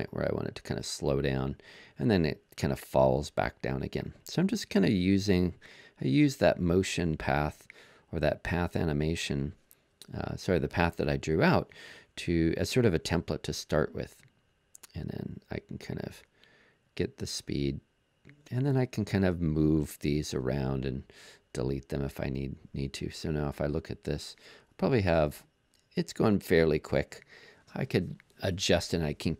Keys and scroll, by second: 19.2 BackSpace.